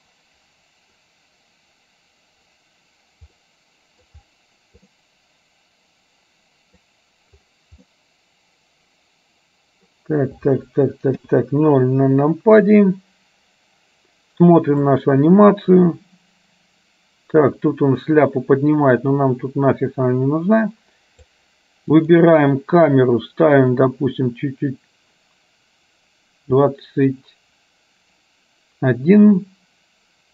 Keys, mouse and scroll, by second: 3.5 middle click, 5.1-7.0 middle drag, 8.4-10.1 middle drag, 11.2 KP_0, 15.0-21.4 drag, 22.0 click, 24.0-30.3 drag.